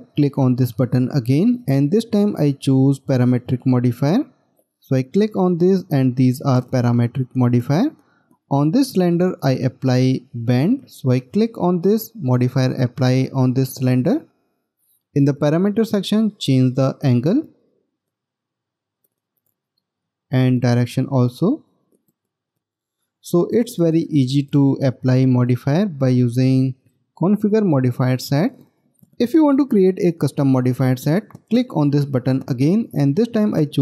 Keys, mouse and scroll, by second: 8.3 middle click.